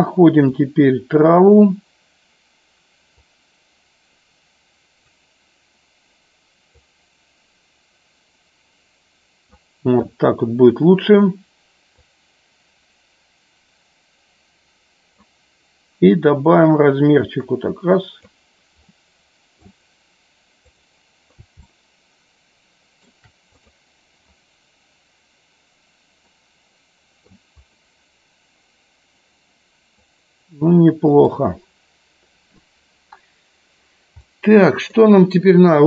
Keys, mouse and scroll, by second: 3.4-5.2 drag, 6.8-9.6 drag, 12.0-15.5 drag, 16.7-18.5 drag, 19.0-20.7 middle drag, 22.0-23.3 shift+middle drag, 26.5-27.5 middle drag, 30.2-31.5 middle drag, 34.5-35.2 middle drag.